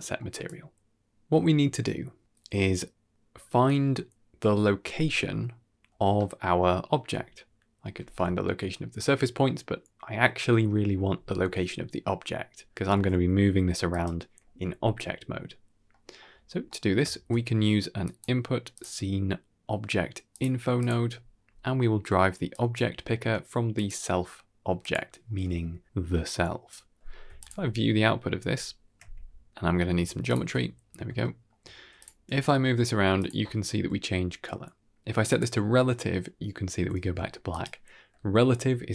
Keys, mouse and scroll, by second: 0.3 click, 1.1 middle click, 6.0-6.8 ctrl+middle drag, 13.0 g, 15.8 middle click, 16.3-16.7 scroll up 2, 16.5 middle click, 17.0 shift+a, 21.3-21.7 scroll up 3, 21.7-22.1 middle drag, 22.4-24.8 drag, 27.3 ctrl+shift+click, 28.9 Left, 29.0 ctrl+right click, 29.1-29.4 scroll down 2, 29.3-29.8 middle drag, 30.2 ctrl+shift+click, 31.1 shift+middle click, 31.9 click, 32.2 g, 35.2 click, 36.9 g.